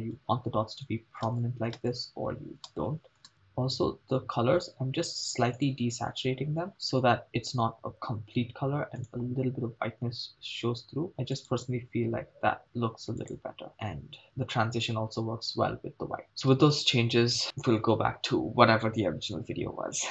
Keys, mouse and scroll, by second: 1.4 shift+space, 1.9 shift+space, 2.7 shift+space, 5.5 click, 9.0 click, 13.3 click, 16.2 shift+space, 16.6 shift+space.